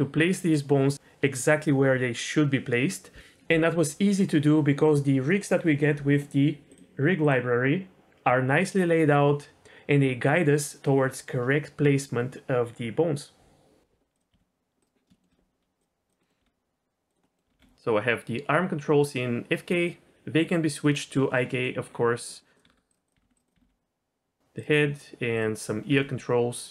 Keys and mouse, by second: 6.7-8.0 drag, 14.3 g, 14.8 right drag, 15.1 middle click, 15.8 click, 16.2 middle click, 16.4 r, 17.3 middle click, 17.4 r, 17.5 r, 19.8 click, 21.5 middle click, 22.1 middle click, 22.5 click, 22.6-23.6 typing, 23.0 click, 23.4 click, 24.5-25.9 right drag, 25.9 r.